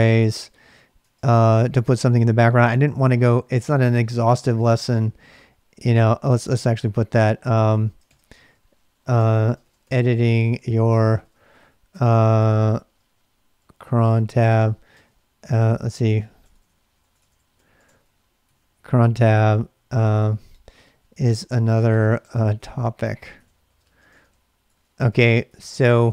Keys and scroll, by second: 0.0-2.1 typing, 5.9 k, 7.5 ctrl+[, 7.8-26.1 typing.